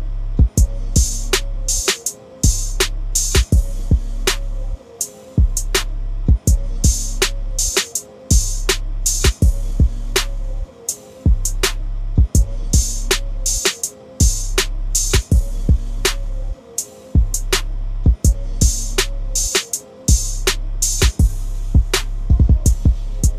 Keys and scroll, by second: 2.8 ctrl+z, 9.8 ctrl+z.